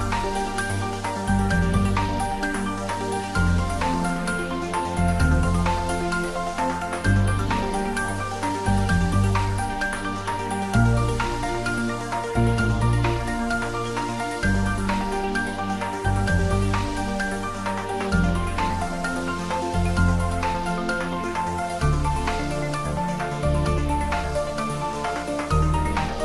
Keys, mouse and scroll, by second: 0.2 z, 0.8 click, 1.0 s, 1.5 click, 2.6 scroll down 1, 3.3 click, 5.6 r, 7.2 click, 7.6 `, 7.7 3, 8.6 r, 9.0 click, 9.3-9.7 scroll down 1, 10.3 g, 12.0 click, 12.4 s, 12.6 click, 12.7 scroll down 1, 13.0-14.4 middle drag, 14.4 `, 14.5 `, 15.4 click, 16.0 scroll up 1, 17.1 click, 18.0 scroll down 1, 19.2 `, 19.4 3, 20.1-20.5 scroll down 2, 20.5-21.3 middle drag, 21.6 s, 22.7 click, 23.4 g, 24.0 click, 25.1 g, 25.5 z.